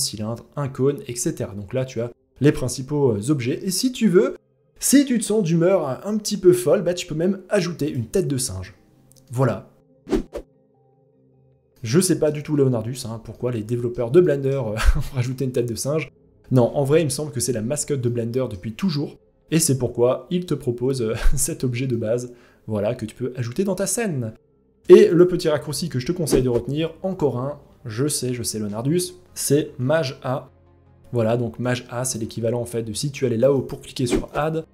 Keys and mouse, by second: 8.8-10.2 middle drag, 10.5-10.9 middle drag, 11.3-11.7 middle drag, 11.7 click, 12.8-13.4 drag, 13.7 shift+middle drag, 14.3-15.6 middle drag, 17.6-18.0 middle drag, 18.8-20.7 middle drag, 21.4-23.3 middle drag, 23.9 shift+middle click, 33.1 click.